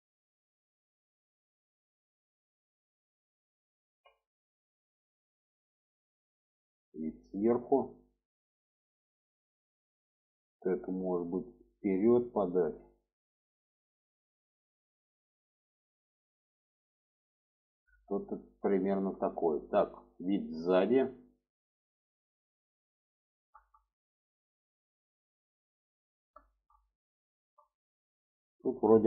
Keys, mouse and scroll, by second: 0.2 click, 0.8-2.1 drag, 3.1 alt+z, 3.9-5.4 middle drag, 6.0-7.0 alt+middle drag, 7.9 shift+middle click, 9.2 shift+middle click, 10.1 click, 10.7-12.1 drag, 13.1 click, 14.2 shift+middle click, 14.9 click, 15.6 click, 18.5 shift+middle click, 19.6 middle click, 20.4 shift+middle click, 20.9 middle click, 21.5-23.3 middle drag, 23.8 alt+middle click, 24.7-26.0 alt+middle drag, 26.2 shift+middle click, 27.1 shift+middle click.